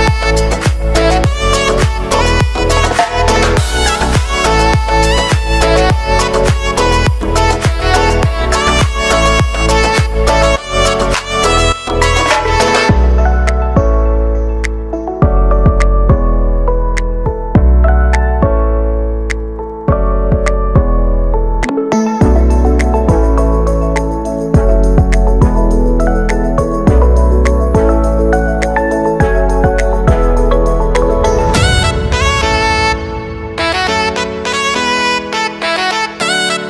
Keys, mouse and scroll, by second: 3.2 click, 6.4 click, 11.0-14.7 drag, 14.7 Return, 15.7-26.7 drag.